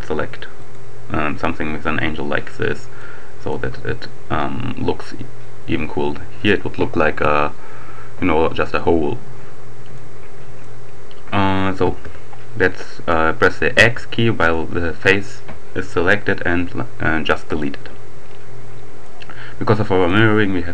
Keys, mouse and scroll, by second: 0.5 right click, 3.0-4.0 middle drag, 9.9-11.1 middle drag, 11.6 x, 13.4 x, 17.0-18.1 right drag, 19.0 middle click, 19.1-19.6 scroll down 1.